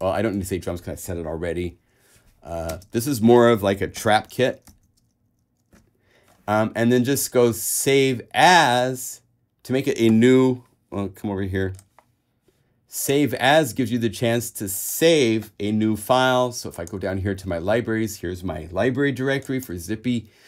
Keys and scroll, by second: 2.9 shift+space, 3.9-5.4 typing.